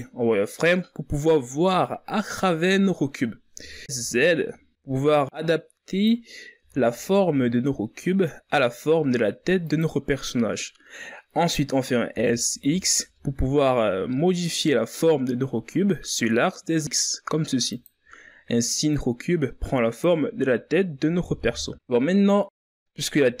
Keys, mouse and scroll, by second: 3.8-4.4 shift+scroll up 2, 4.7-5.7 ctrl+scroll down 1, 5.7 s, 6.0 z, 7.0 s, 7.5-8.8 drag, 8.8 s, 14.3 s, 21.2-23.4 drag.